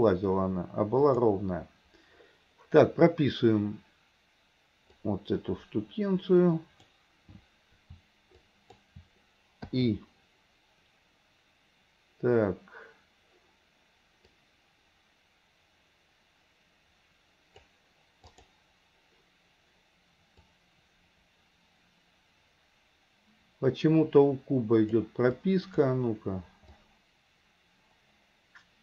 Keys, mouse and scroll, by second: 5.1-7.0 drag, 8.5-8.9 shift+drag, 9.7 i, 14.4-17.7 drag, 18.4 click, 20.6-25.0 drag, 25.5-25.9 drag, 26.9-28.8 drag.